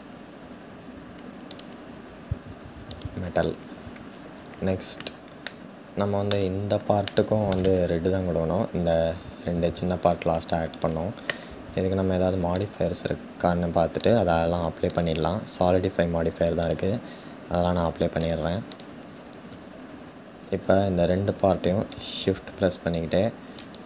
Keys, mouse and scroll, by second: 2.6-3.2 drag, 3.2-3.7 scroll down 2, 5.2-9.5 middle drag, 9.5-10.4 scroll up 2, 10.4 click, 14.6 click, 18.4-21.6 drag, 23.3 shift+click.